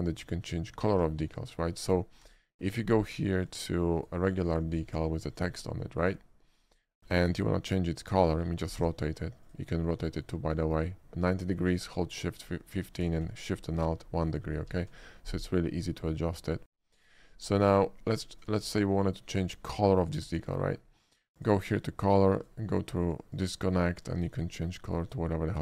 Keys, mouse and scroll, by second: 0.4 x, 0.5 click, 0.7 click, 1.0 shift+a, 1.9 click, 2.3 d, 3.4 click, 4.0 click, 4.8-5.1 middle drag, 5.4 click, 5.7-6.1 middle drag, 6.6 click, 7.0 shift+middle click, 7.3-8.5 shift+middle drag, 8.8 d, 9.5 click, 10.7 middle click, 12.0 middle click, 13.5 alt+shift+middle click, 13.9 alt+shift+middle click, 14.1 alt+shift+middle click, 14.7 alt+shift+middle click, 15.0 alt+shift+middle click, 15.8 scroll down 1, 15.9 alt+shift+middle click, 16.1 alt+shift+middle click, 16.9 shift+middle click, 17.2 shift+middle click, 18.7 shift+middle drag, 20.0 shift+middle click, 20.4 shift+middle click, 21.4 shift+click, 22.4 shift+click, 23.4 click, 24.1 click, 24.4 click, 25.0 click.